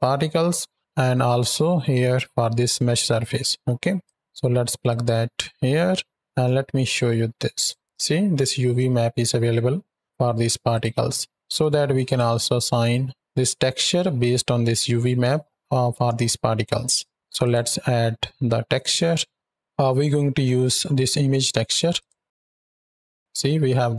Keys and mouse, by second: 1.0 click, 2.8-3.2 middle drag, 3.9-4.9 drag, 5.5 middle drag, 10.6 click, 11.9-12.4 ctrl+shift+drag, 16.1 shift+click, 17.3 click.